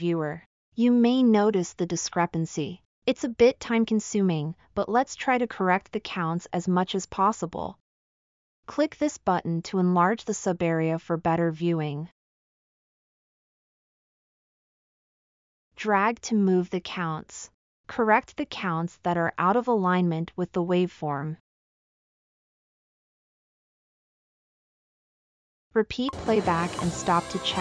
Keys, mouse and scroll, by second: 26.0 space.